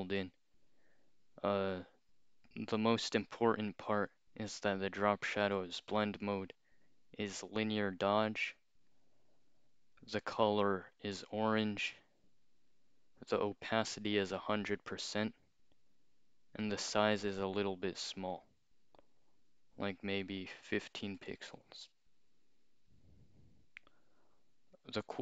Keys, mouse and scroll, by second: 6.3 click, 8.9 click, 10.1 click, 11.9 click, 16.6 click, 18.4 click, 20.1 click, 20.2 click, 20.5-21.5 typing, 24.8 click.